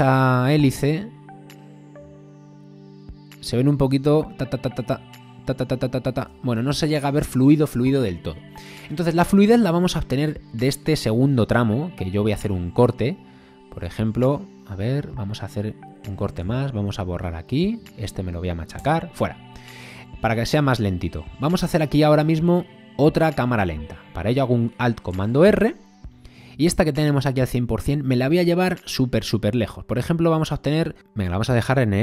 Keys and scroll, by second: 6.2 space, 16.4 b, 17.8 a, 18.8 BackSpace.